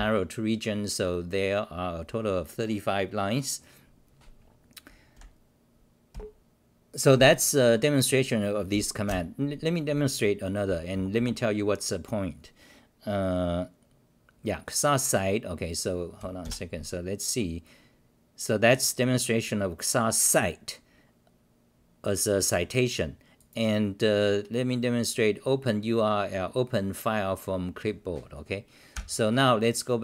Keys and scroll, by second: 5.1 ctrl+-, 6.1 ctrl+g, 9.0 ctrl+w, 10.7 t, 10.9 o, 11.1 Return, 16.4 ctrl+r.